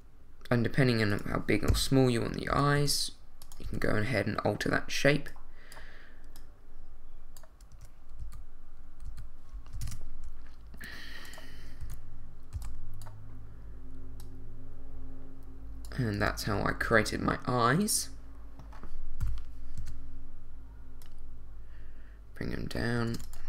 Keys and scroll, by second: 1.7 7, 2.5 s, 2.8 y, 3.6 z, 7.7 Tab, 8.2 z, 9.7 ctrl+z, 9.8 ctrl+Tab, 11.8 a, 12.5 b, 16.2 Tab, 16.8 z, 19.2 |, 19.8 z, 23.1 shift+d.